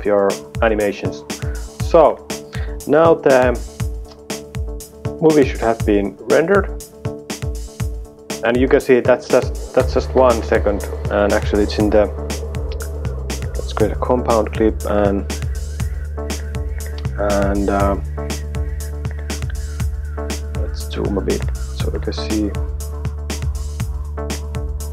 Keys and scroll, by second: 6.0 space, 10.0 space.